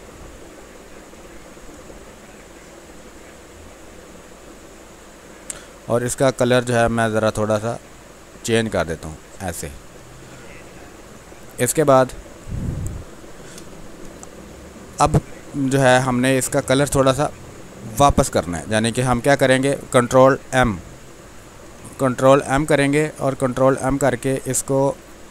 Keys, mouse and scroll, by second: 5.2 click, 9.7 click, 11.5 ctrl+space, 11.8 ctrl+click, 12.0 ctrl+space, 13.0 click, 13.3 space, 14.0 space, 14.4 ctrl+click, 16.2-20.5 drag, 20.5 ctrl+m, 22.7-24.2 drag, 24.2-25.3 drag.